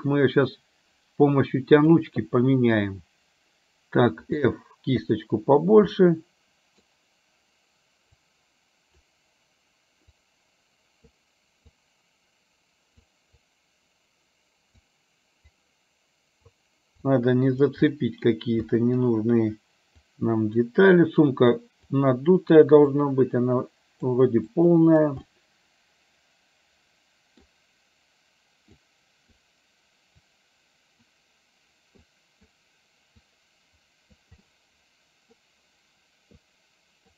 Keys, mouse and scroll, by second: 2.0 click, 4.3 f, 6.1 middle click, 8.4 click, 10.3 click, 11.8-13.1 drag, 13.5-14.9 drag, 15.6 click, 17.1 click, 18.0 middle click, 18.8 middle click, 20.1 click, 21.1 click, 21.9 click, 23.0-24.1 drag, 24.6 click, 25.2-27.5 middle drag, 28.8 click, 30.3 click, 32.1 click, 33.3 click, 34.5 middle click, 36.5 click.